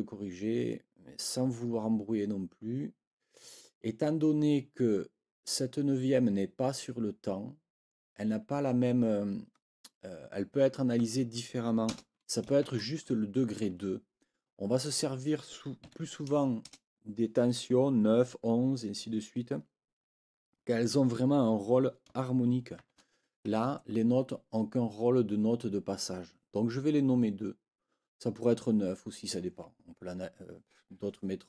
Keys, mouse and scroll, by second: 11.9 BackSpace, 13.7 Escape, 14.7 click, 15.8 Right, 16.6 BackSpace, 23.5 Escape.